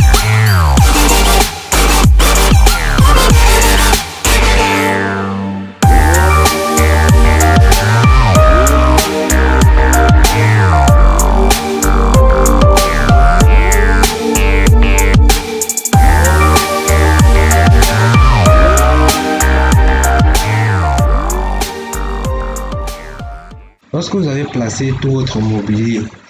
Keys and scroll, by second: 1.1 Escape, 1.7 ctrl+x, 4.7 2, 4.8 ., 4.9 5, 13.3 2, 16.0 0, 16.1 ., 16.1 5, 18.5 1, 18.6 ., 18.7 8, 21.0 1, 21.1 ., 21.2 7.